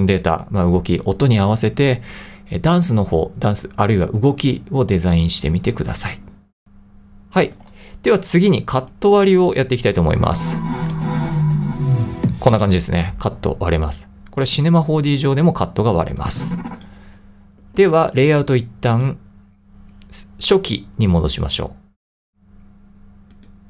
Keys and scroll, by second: 7.6 super+Tab, 12.5 space.